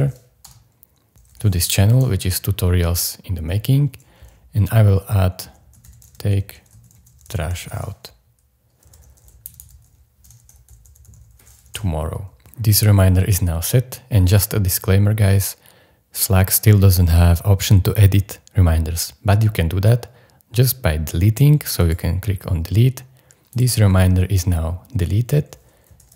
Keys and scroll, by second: 0.0-1.8 typing, 0.4 Return, 2.0 Return, 5.2-12.1 typing, 25.8-26.1 typing.